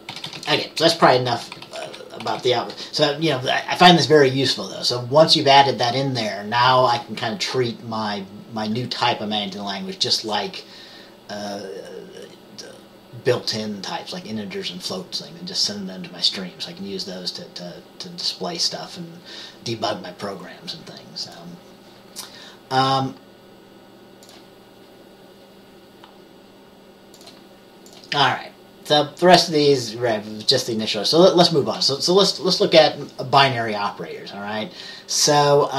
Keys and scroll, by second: 0.3 typing, 1.9-2.5 typing.